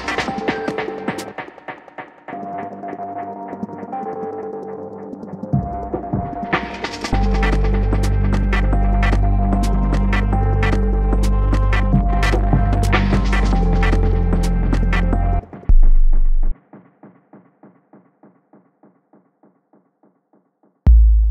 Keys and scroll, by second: 18.8 shift+super+Tab, 19.6 shift+Tab, 20.8 shift+super+Up.